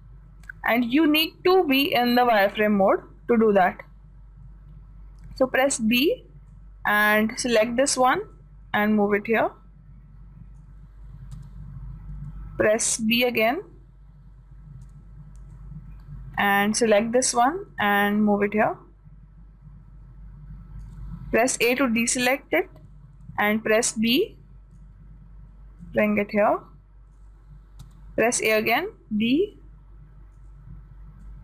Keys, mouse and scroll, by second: 2.0-3.9 drag, 5.9 b, 8.8-10.8 drag, 11.8 a, 12.6 b, 15.4 b, 18.3-20.2 drag, 22.3 a, 23.6 b, 26.3-28.1 drag, 28.3 a, 29.2 b.